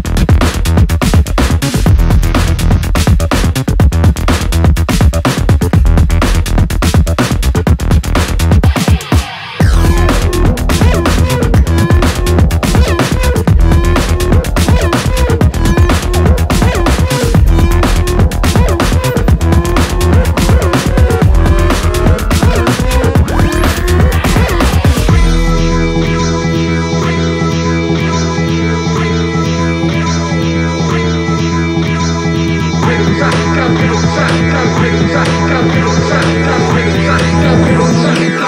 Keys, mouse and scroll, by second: 6.7-8.3 typing, 10.0-12.5 drag, 15.0-15.4 drag, 19.1 click, 19.5-20.7 drag, 24.1-28.3 drag, 29.4 click, 33.3 click, 36.0 click, 38.2 click.